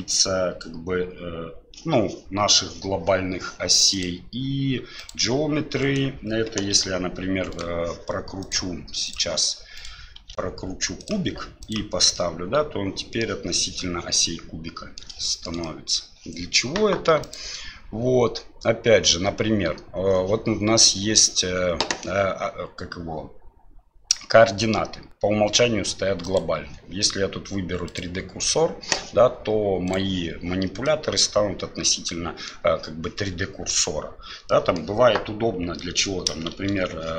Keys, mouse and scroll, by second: 4.1-5.1 drag, 5.8 right click, 6.7 r, 8.6-9.3 drag, 9.8 right click, 10.2 r, 11.6 click, 12.1-13.2 middle drag, 14.1-15.0 middle drag, 15.2 shift+middle drag, 15.6-15.9 middle drag, 17.2-22.1 drag, 26.4-28.7 drag, 29.8 click, 30.8-32.5 middle drag, 34.5-34.8 middle drag, 35.8 middle click, 36.5 shift+a.